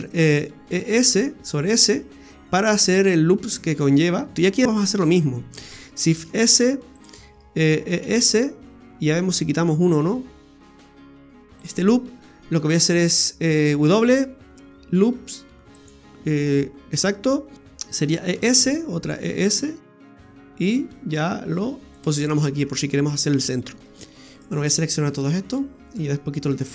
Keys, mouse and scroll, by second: 0.8 e, 4.3-4.6 scroll up 1, 4.6 right click, 5.0 alt+shift+right click, 5.2 right click, 6.2 shift+s, 7.8 e, 13.8 w, 18.2 e, 22.2-22.7 scroll down 7, 23.2-23.8 scroll up 7, 23.8 middle click, 24.0 alt+shift+right click, 24.3 shift+right click, 24.7 right click, 25.1 shift+right click, 25.4 shift+right click, 25.9 shift+right click, 26.4 shift+right click.